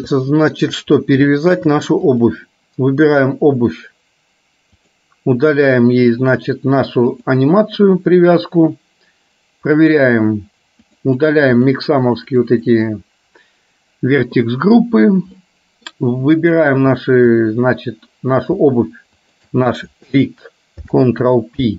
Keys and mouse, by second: 0.3 shift+middle click, 1.5 shift+middle click, 2.3 click, 4.9 click, 7.3 click, 11.2-13.0 drag, 15.5 middle click, 20.8 ctrl+p.